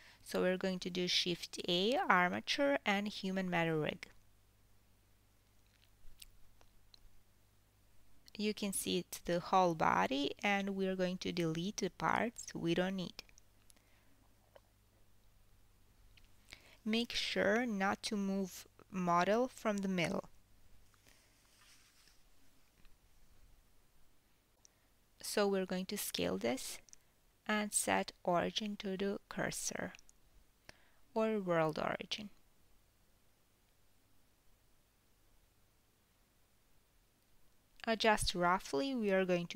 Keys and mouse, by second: 0.2-6.2 middle drag, 1.2 shift+a, 6.9 g, 9.8 s, 12.5 Tab, 13.6-14.5 ctrl+middle drag, 14.5-36.4 drag, 17.5 x, 21.5 x, 24.8 Tab, 33.2 Tab, 34.2 a, 36.2 g, 36.4-39.5 middle drag, 36.9 s.